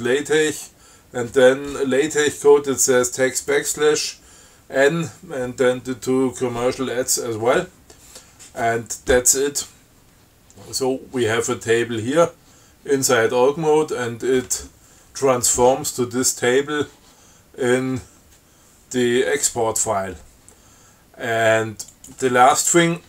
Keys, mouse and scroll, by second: 22.2 click.